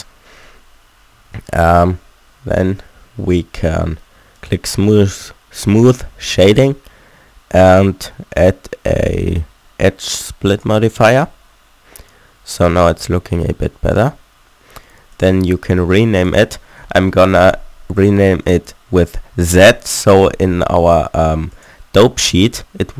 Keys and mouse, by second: 0.6 Tab, 1.2 a, 1.4 Tab, 11.0-12.8 middle drag, 13.0 middle click, 13.5 middle click, 14.0 middle click, 15.2-19.6 middle drag.